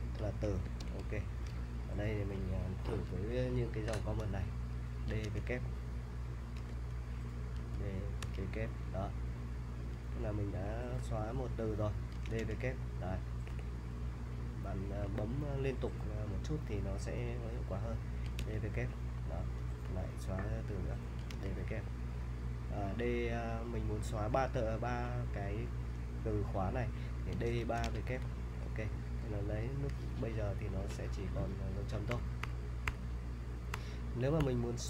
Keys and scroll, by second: 0.8 super+Tab, 4.8-8.2 typing, 9.7-15.0 typing, 18.0-19.8 typing, 20.9-21.8 typing, 27.1-29.7 typing, 32.1-34.4 typing.